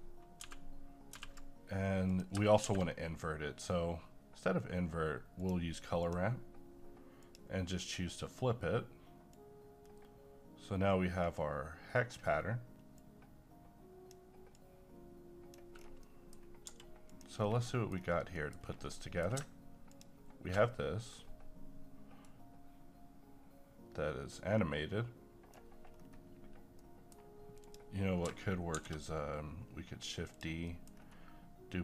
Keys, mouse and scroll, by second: 0.0-1.1 typing, 2.1 click, 2.6 a, 5.4-15.7 drag, 15.7-16.0 scroll down 1, 16.0 middle click, 16.4 scroll up 1, 16.7 g, 17.1 click, 17.4 scroll down 1, 17.7 middle click, 17.9-18.4 scroll down 1, 18.4 middle click, 18.5-19.0 scroll up 1, 19.0 middle click, 19.2 scroll up 1, 19.9 ctrl+shift+click, 22.2-25.9 right drag, 25.9 scroll up 1, 26.8 middle click, 27.6 click, 28.8 d, 30.3 click, 30.7 middle click, 31.0-31.5 scroll up 1.